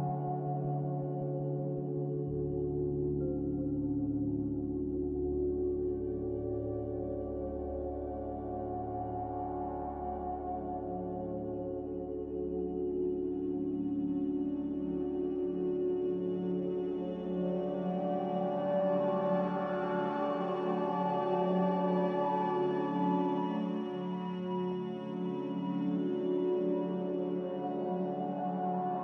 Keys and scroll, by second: 2.0 a, 4.0 z, 7.6 f, 22.3 n, 27.9 a.